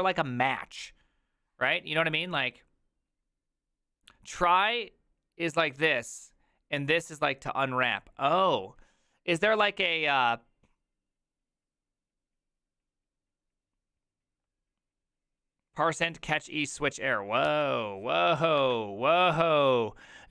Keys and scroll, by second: 0.0 b, 17.5 alt+{.